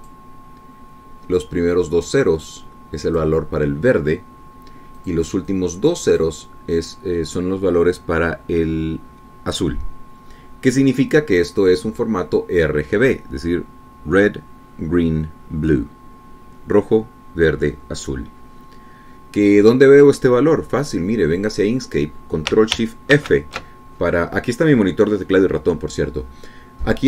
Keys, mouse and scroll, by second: 1.4 click, 3.6-4.8 drag, 6.4 click, 6.9 click, 22.2 click, 24.6 ctrl+shift+f.